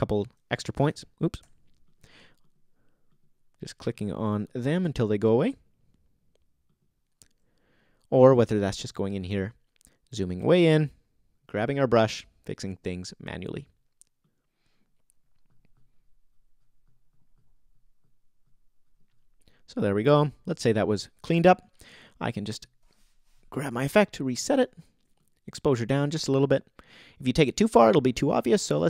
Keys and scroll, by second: 0.9 alt+super+z, 1.4 super+z.